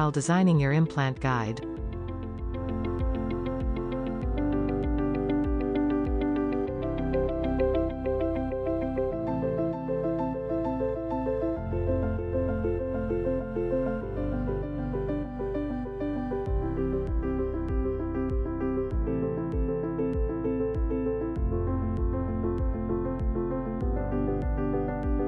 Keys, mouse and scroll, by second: 3.5 middle click, 4.0 scroll up 2, 4.5-6.5 shift+middle drag, 6.8-9.1 shift+middle drag, 9.1 e, 9.2 e, 9.4 e, 9.7-10.4 scroll up 1, 10.7 click, 11.0 middle click, 11.3 a, 13.9 middle click, 14.0 scroll down 1, 14.3 click, 14.5 middle click, 14.7 click, 14.8 scroll down 1, 15.7 a, 16.0 middle click, 16.2 click, 16.5 ctrl+z, 16.9-17.3 e, 17.5 middle click, 18.4-23.0 typing, 20.4 shift+middle click, 22.1 middle click, 23.3 middle click, 24.2 shift+click, 24.9 f, 25.1 scroll down 3.